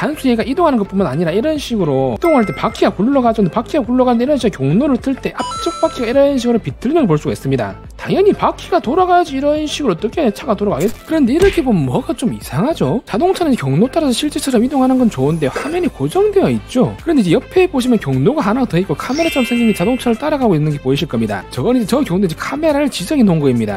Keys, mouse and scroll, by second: 1.0 alt+middle click, 1.6 middle click, 3.1 scroll down 3, 3.4 middle click, 3.7 scroll up 1, 4.4-7.6 drag, 7.9 scroll down 1, 8.2 middle click, 8.6 scroll down 1, 9.5-10.7 drag, 11.8 click.